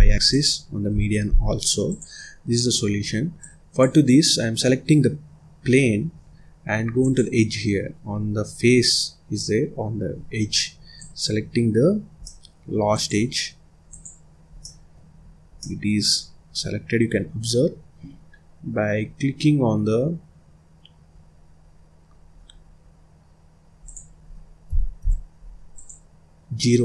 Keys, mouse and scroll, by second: 1.3 ctrl+z, 1.8 click, 3.4 click, 7.0 click, 10.5-10.9 scroll up 1, 10.9 click, 12.2 middle click, 12.9 click, 13.8 click, 14.6 middle click, 15.1-15.5 scroll up 1, 15.5-18.5 middle drag, 21.3-22.0 scroll down 2, 22.0-23.8 scroll up 1, 23.8-25.8 drag.